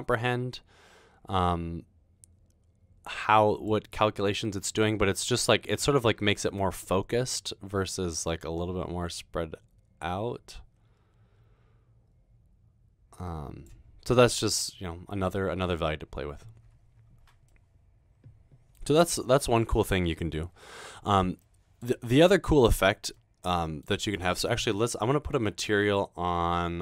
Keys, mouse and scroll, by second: 5.0 middle click, 6.6-13.9 drag, 14.1-15.3 middle drag, 17.6-18.4 middle drag, 21.5-21.8 middle drag.